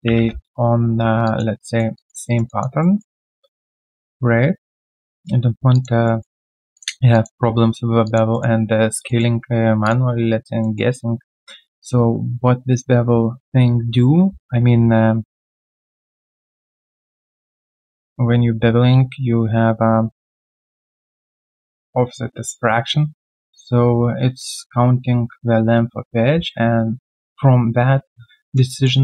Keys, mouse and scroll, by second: 0.2 Return, 1.2 alt+click, 1.6 alt+middle click, 1.9 alt+click, 2.2 alt+right click, 2.4 alt+click, 2.8 alt+middle click, 3.2 alt+click, 4.4 right click, 5.7 alt+click, 5.9 alt+right click, 6.2 alt+middle click, 7.1 alt+click, 8.0 alt+click, 8.3 alt+middle click, 9.0 alt+middle click, 10.6 alt+middle click, 14.0 t, 20.8 alt+middle click, 28.4 alt+right click, 28.6 alt+middle click.